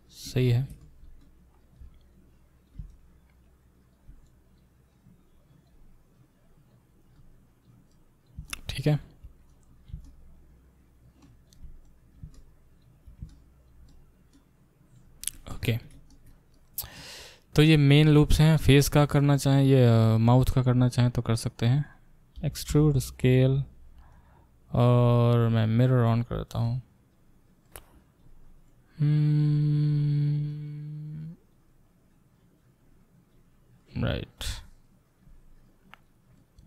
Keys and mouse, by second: 2.1-19.4 drag, 18.8-24.1 alt+middle drag, 19.6 click, 21.0 click, 21.7 click, 21.8 click, 22.4 e, 24.1-25.8 drag, 25.8 middle click, 26.6-36.6 drag.